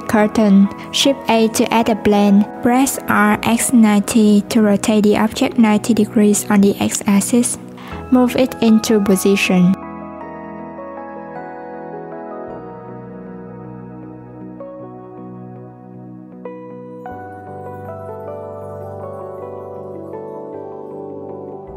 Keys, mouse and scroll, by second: 1.8 shift+a, 7.8 click, 9.1 click, 11.7 click, 16.1 s, 18.5 click, 20.5 s.